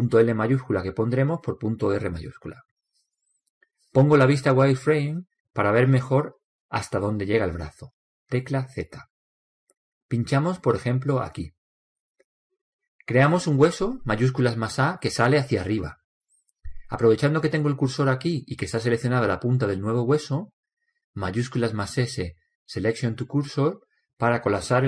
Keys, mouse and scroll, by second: 6.0 z, 8.3-11.2 drag, 14.8 shift+a, 15.7-20.4 middle drag, 22.3 shift+s.